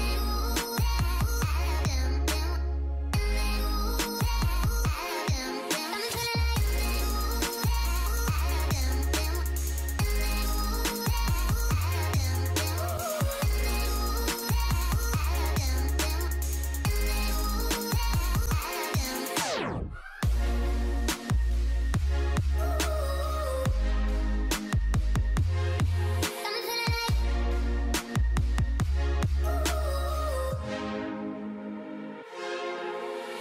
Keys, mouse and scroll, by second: 1.2-1.9 alt+scroll down 1, 9.0 ctrl+click, 10.8 right click, 17.6 right click, 18.4 ctrl+d, 21.3-21.7 alt+scroll up 1, 22.0 alt+scroll up 1, 26.1 alt+scroll up 1.